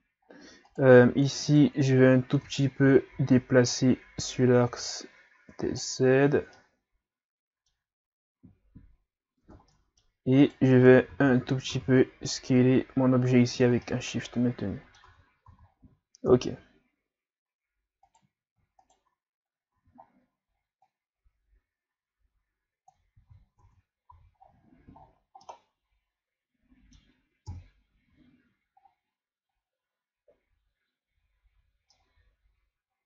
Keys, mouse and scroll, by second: 0.3 scroll up 2, 0.7 right click, 1.5 shift+right click, 2.5 Tab, 2.8 a, 3.2 a, 3.7-6.6 drag, 6.6-9.5 middle drag, 9.5 Tab, 9.7 middle click, 10.4 right click, 10.8 Tab, 11.1 a, 11.3 a, 11.7 s, 13.8-15.1 middle drag, 15.1 Tab, 15.5 a, 15.7-16.3 scroll down 2, 16.3 KP_3, 17.5-18.1 scroll up 2, 18.1 right click, 18.8 shift+right click, 19.5 scroll up 1, 19.8 Tab, 20.9-23.2 drag, 23.2 ctrl+z, 23.6 Tab, 24.1 a, 24.4-25.5 scroll down 11, 25.5-27.5 middle drag, 27.5 KP_1, 28.8-29.7 scroll up 8, 31.9-33.0 middle drag.